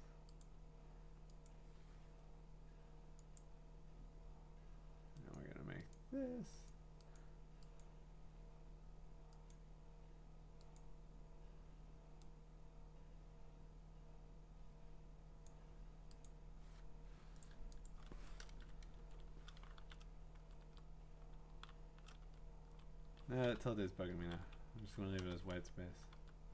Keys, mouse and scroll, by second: 0.4 click, 1.5 click, 3.4 click, 5.3 click, 5.9 click, 6.7 click, 7.8 click, 9.5 click, 10.8 click, 15.4 click, 16.2 click, 17.4 click, 17.9 click, 18.5 Return, 19.0 ctrl+v, 19.8 Down, 20.6 Right, 21.5 Down, 23.0 Up, 23.4 BackSpace, 24.8 Up, 25.2 BackSpace.